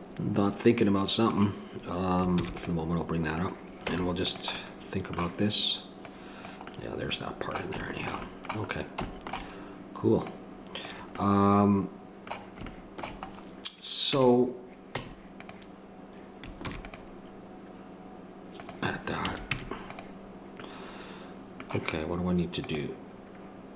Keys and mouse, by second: 2.4 ctrl+r, 3.9 Tab, 6.0-7.4 drag, 7.4-10.9 middle drag, 10.9 click, 11.8-14.0 middle drag, 14.0 Tab, 15.0 Tab, 16.6 ctrl+r, 19.2 a, 19.5 Tab.